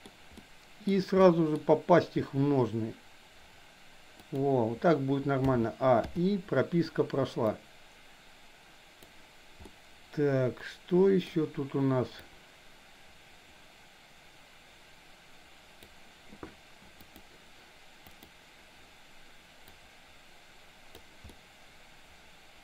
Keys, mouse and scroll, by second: 0.0 scroll down 1, 0.3-1.0 middle drag, 1.2 scroll up 1, 1.3 middle click, 2.2 r, 5.5 a, 6.1 i, 7.5-9.1 drag, 9.7-11.2 middle drag, 12.3-15.8 drag, 17.0 click, 18.1 click, 19.7-21.1 drag, 21.3-22.6 middle drag.